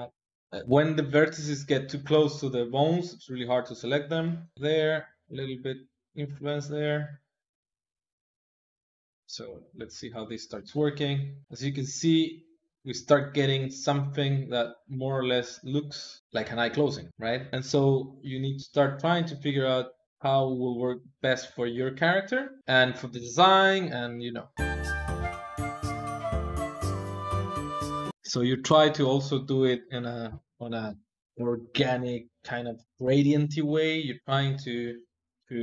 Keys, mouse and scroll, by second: 4.8-11.5 drag, 14.2 click, 15.5 click, 18.0 ctrl+click, 18.9 click, 20.8 ctrl+click, 22.6 click, 23.7 ctrl+Tab, 24.0 click, 24.1 ctrl+Tab, 24.2 click, 24.7 ctrl+Tab, 25.3 click, 26.0 click, 26.6 click, 27.0-29.0 drag.